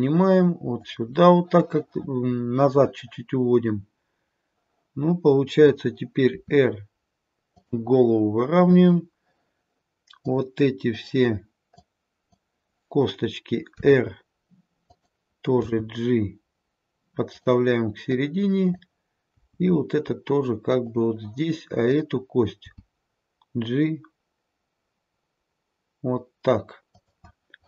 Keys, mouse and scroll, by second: 2.4-5.3 scroll up 2, 5.5 click, 6.2 r, 8.1 scroll down 1, 10.2 click, 10.9 click, 11.7 click, 13.7 r, 15.5 g, 18.0 click, 19.2 g, 21.9 click, 22.6 g.